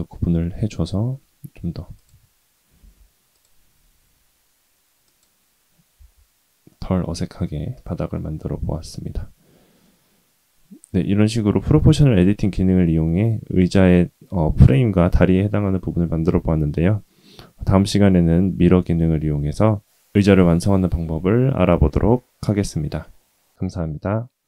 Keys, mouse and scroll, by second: 0.5 Tab, 1.9 click, 2.7 ctrl+r, 5.9 Tab, 6.6-7.1 middle drag, 7.2-7.8 scroll down 2, 7.8-8.3 middle drag, 8.6-9.5 scroll down 1, 9.5-9.8 scroll down 1, 9.8-11.4 middle drag, 11.7-12.2 shift+middle drag, 12.8-13.4 scroll down 1.